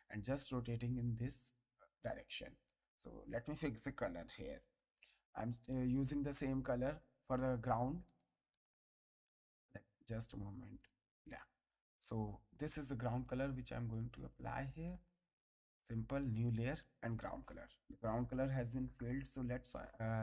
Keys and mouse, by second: 0.9 click, 2.3 click, 4.4 g, 10.8 click, 12.0 alt+click, 15.3 click.